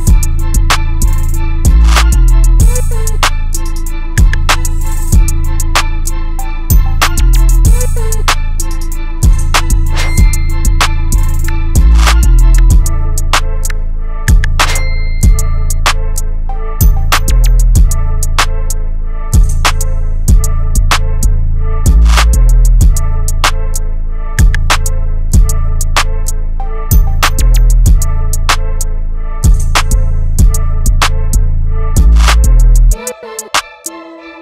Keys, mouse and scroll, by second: 1.3 right click, 3.4 click, 4.4 right click, 5.8-11.4 drag, 11.4-16.3 drag, 16.3 right click, 17.9 click, 18.6 right click, 19.5-33.0 drag.